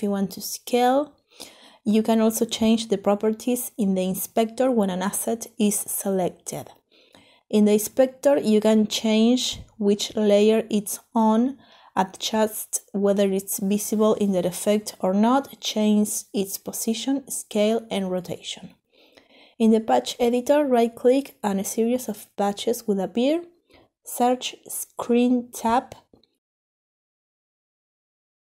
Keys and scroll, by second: 5.4 ctrl+z, 13.7 4, 14.2 Return, 15.9 ctrl+z, 25.5-26.2 typing.